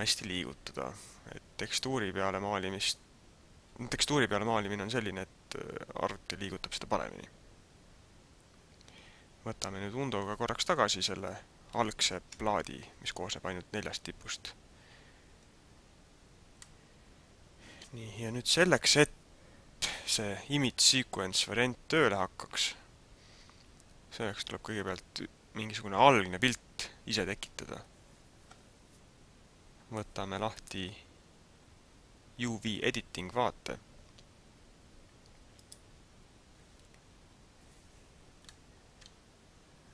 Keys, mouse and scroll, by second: 11.9 ctrl+z, 15.4-15.7 scroll down 2, 16.3 scroll down 1, 16.8 middle click, 27.6 Tab, 30.5 click.